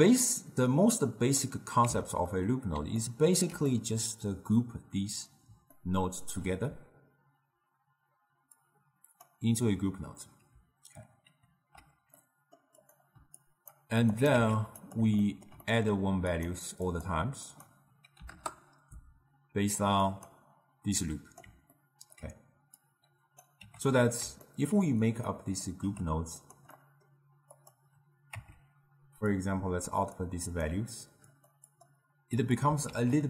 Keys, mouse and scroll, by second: 0.5-1.9 drag, 1.9 x, 2.4-8.6 middle drag, 8.6-10.9 drag, 11.4 ctrl+g, 12.2 middle click, 12.9 click, 13.4 click, 14.2 click, 14.4 shift+d, 15.3-16.4 ctrl+middle drag, 16.4-21.8 drag, 21.8-22.9 ctrl+middle drag, 22.9-23.6 drag, 23.6 g, 24.5-25.4 ctrl+middle drag, 25.4 click, 25.9 g, 26.8-27.6 middle drag, 27.6 click, 28.4 Tab, 29.4-30.6 drag, 31.4 click, 31.7 click, 32.9 shift+d.